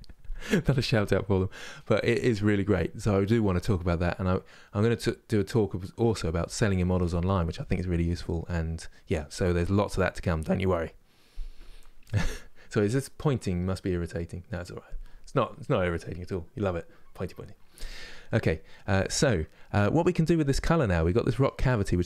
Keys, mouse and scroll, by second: 21.1 click.